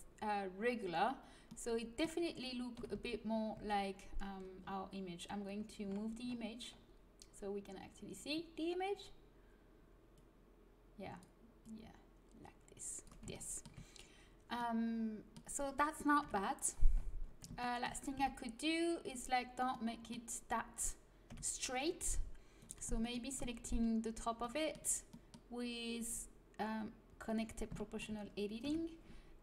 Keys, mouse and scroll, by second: 2.7 KP_1, 2.9 z, 3.5 z, 7.0-10.1 middle drag, 10.1 click, 10.5 middle click, 10.9-12.7 drag, 12.7-16.1 middle drag, 16.1 KP_3, 18.1 Tab, 21.2 KP_3, 22.5-24.3 right drag, 24.3-26.0 middle drag, 26.0-28.6 drag, 28.6 KP_3.